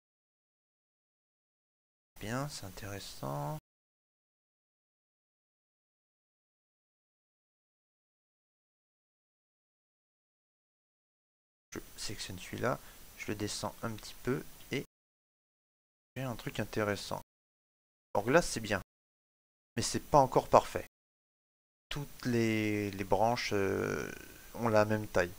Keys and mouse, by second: 0.3 middle click, 3.6 shift+middle click, 3.9 middle click, 7.0 click, 9.9 click, 13.5 click, 14.1 shift+middle click, 14.5 middle click, 17.8 shift+middle click, 18.2 middle click, 22.0 shift+middle click, 22.9 ctrl+middle click, 23.4 shift+middle click.